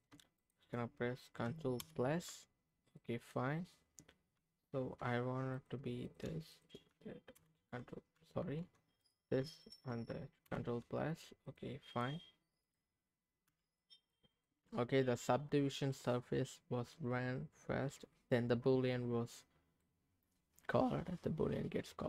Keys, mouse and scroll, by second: 0.4 shift+click, 1.8 ctrl+KP_Add, 3.0 middle click, 4.7 ctrl+z, 5.5 click, 6.5 shift+click, 7.4 ctrl+KP_Add, 8.4 ctrl+z, 8.5 ctrl+x, 9.0 click, 9.6 shift+click, 10.4 ctrl+KP_Add, 11.4 click, 11.9 click, 12.6 click, 13.4 h, 13.8 middle click, 14.3 click, 19.8-22.0 middle drag.